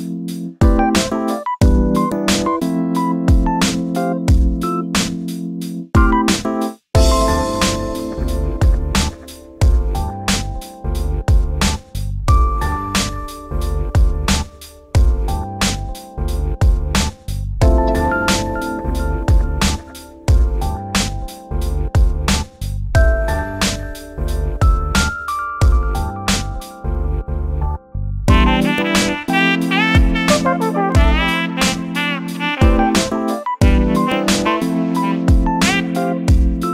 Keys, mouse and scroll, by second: 0.5-2.0 drag, 6.1 click, 7.0 f, 7.8 click, 8.3 f, 9.5 click, 10.3 click, 11.6 shift+d, 14.2 e, 15.9 e, 17.6 e, 18.9 e, 20.2 e, 22.3 shift+click, 22.7 f, 22.9-23.4 scroll down 2, 23.4 shift+middle click, 24.1 scroll down 3, 24.3-25.9 shift+middle drag, 26.6 shift+right click, 26.9-28.2 scroll up 3, 28.5 shift+a, 29.4 s, 31.0 g, 32.3 s, 34.3 shift+d.